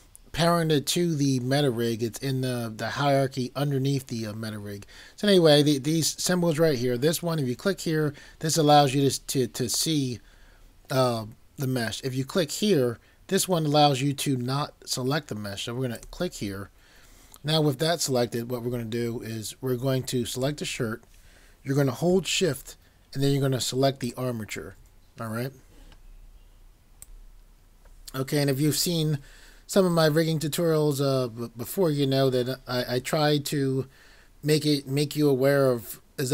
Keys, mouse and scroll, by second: 27.0 click.